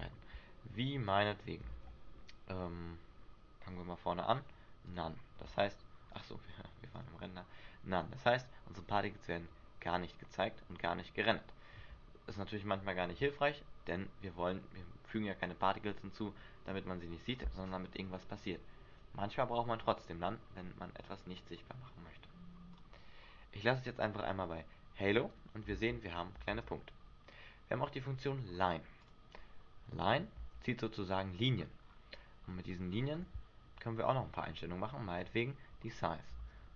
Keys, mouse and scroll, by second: 0.0 alt+a, 0.8 Escape, 1.3 click, 1.8 alt+a, 2.8 Escape, 5.0 click, 5.7 click, 7.2 click, 8.4 click, 22.9 click, 25.8 alt+a, 26.7 alt+a, 29.2 click, 30.5 alt+a, 32.0 scroll down 6, 33.1-33.4 scroll down 2, 33.9 Escape, 36.0 click, 36.6 alt+a.